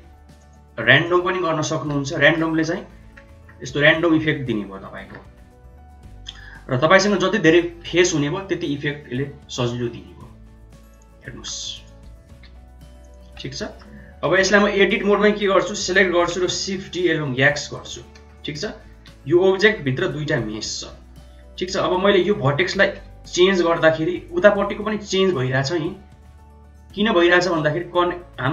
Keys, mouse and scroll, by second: 0.4 click, 1.7 g, 11.1 middle click, 11.6 click, 12.2 g, 13.2 Tab, 13.4 middle click, 14.3 Tab, 15.4 a, 16.3 shift+d, 18.1 Tab, 18.8 g, 20.9 Tab, 22.5 shift+middle click, 23.2 g, 27.4-28.5 drag.